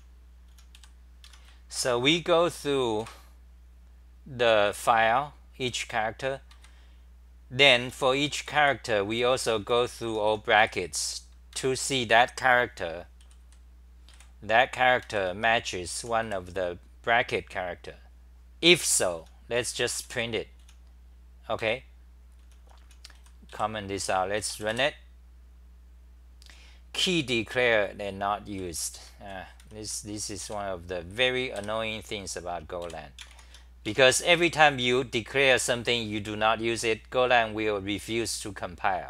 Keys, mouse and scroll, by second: 0.0-3.0 typing, 1.3 Home, 5.7 g, 6.5 ctrl+g, 7.8-10.6 typing, 11.5 ctrl+g, 12.7 t, 13.2 g, 13.4 g, 14.1 1, 15.0 ctrl+g, 15.3 r, 16.0 h, 16.2 1, 18.8 ctrl+g, 18.9-20.6 typing, 21.6 ctrl+g, 22.2-24.0 typing, 28.5-29.0 c, 29.6 r, 29.8 r, 30.4 ., 31.5 f, 32.8 ., 33.9 Home, 34.3 3.